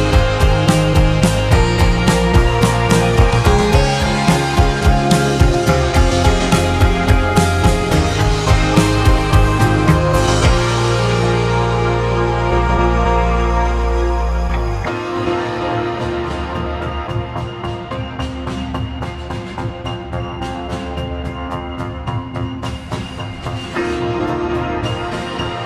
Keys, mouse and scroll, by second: 1.1 shift+a, 2.8 shift+a, 4.5-9.4 drag, 9.4 r, 12.5-15.3 drag, 15.3 r, 20.4 s.